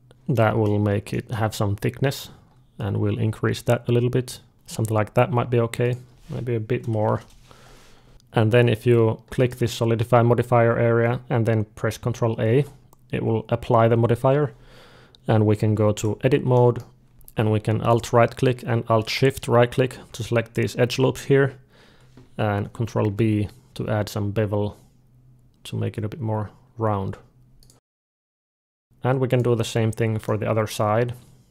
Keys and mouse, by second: 0.2-2.6 middle drag, 2.6-4.5 drag, 5.7-7.7 drag, 8.1-9.2 middle drag, 9.2-12.1 drag, 12.3 ctrl+a, 15.6 Tab, 16.4 middle click, 17.1 alt+a, 17.7-21.1 drag, 20.5 d, 22.9 ctrl+b, 27.9 alt+a, 28.1 middle click, 29.1-31.1 drag, 29.5 d, 31.1 middle click, 31.4-31.5 drag.